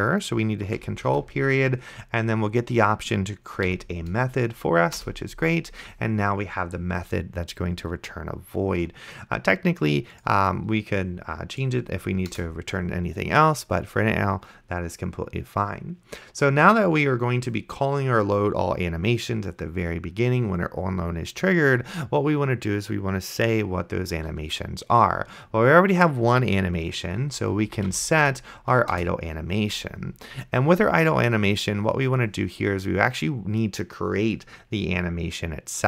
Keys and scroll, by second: 1.4 ctrl+., 3.7 Down, 5.0 Return, 12.6 Return, 27.6-28.4 typing, 29.0 Return.